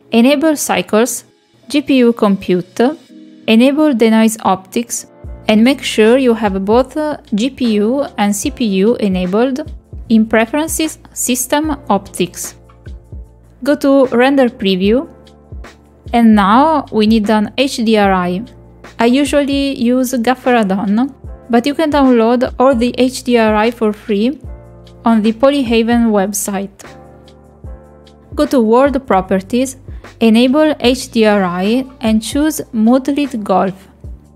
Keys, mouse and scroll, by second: 1.5 click, 2.9 click, 5.0 click, 5.2 click, 5.8 click, 9.0 click, 19.1 click, 23.1 click, 32.2 click, 33.3 click, 34.2 click.